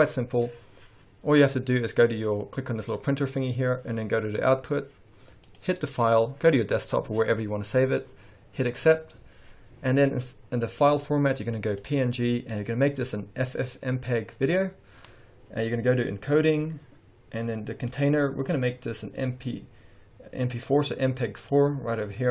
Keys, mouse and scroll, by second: 0.0-3.8 drag, 5.4 click, 11.8-16.5 drag, 17.9-22.3 drag.